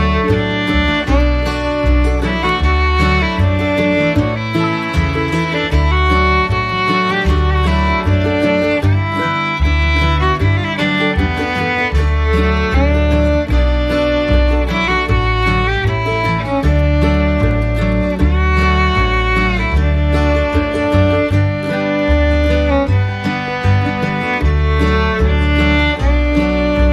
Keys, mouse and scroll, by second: 3.7 ctrl+s, 11.8 x, 12.3 ctrl+click, 17.9 right click, 19.1 ctrl+click, 22.0 ctrl+click, 22.5 ctrl+click, 22.9 ctrl+click, 26.1 ctrl+z.